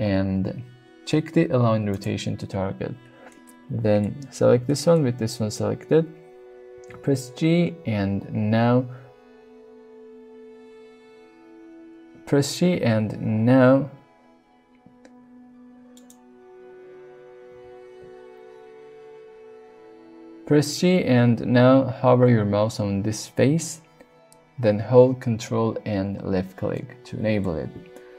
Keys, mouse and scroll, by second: 3.3-4.0 middle drag, 4.7 shift+middle click, 6.8 g, 15.9 right click, 17.5 g, 26.1-26.5 ctrl+drag, 26.8-27.5 middle drag, 28.0-28.1 middle drag.